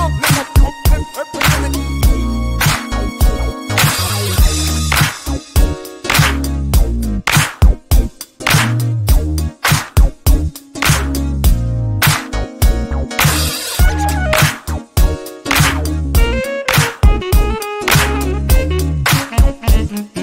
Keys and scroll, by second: 13.6 9, 13.9 6, 14.1 Return.